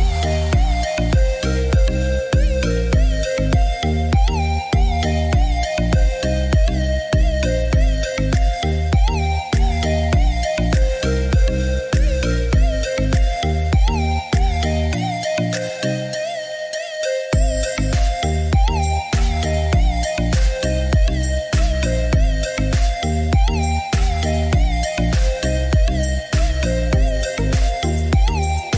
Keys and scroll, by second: 22.5-23.7 typing, 23.8 Return, 26.7 6, 27.0 Return.